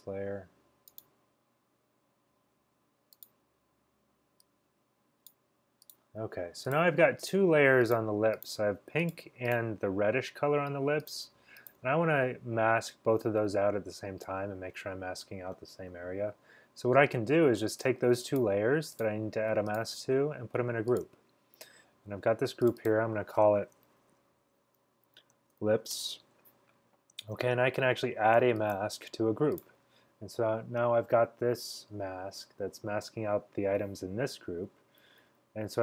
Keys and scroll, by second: 24.9-26.2 typing, 34.2-35.5 typing.